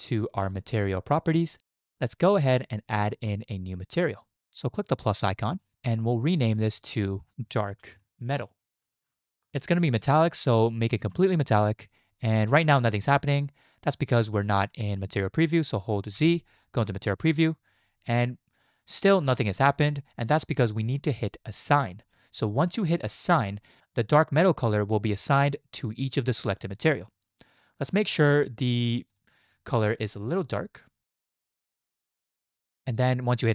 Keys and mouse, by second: 5.5 click, 6.5-9.5 drag, 11.0 click, 16.2 z, 30.2 drag.